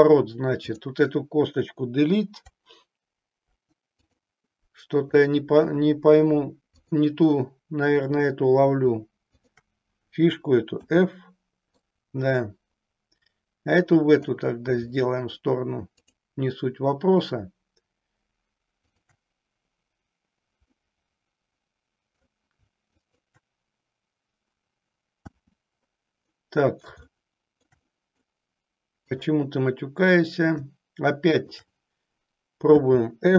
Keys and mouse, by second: 0.6 click, 3.3 Delete, 5.1 click, 6.6 click, 9.4 shift+click, 10.8 f, 11.8-14.4 middle drag, 15.0 middle click, 18.8 shift+click, 20.6-22.3 middle drag, 22.9 shift+click, 25.1 f, 26.4 middle click, 27.1 shift+middle click, 29.0 click, 31.4 shift+click, 32.8 f.